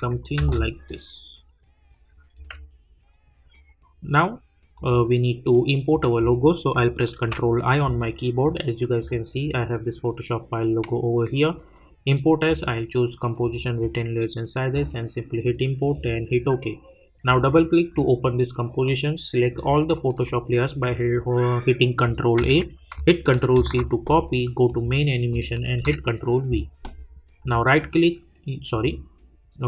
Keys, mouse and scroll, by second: 4.7 click, 7.2 ctrl+i, 9.0 click, 12.4 click, 24.7 click, 25.8 ctrl+v, 27.4 right click, 28.7 click.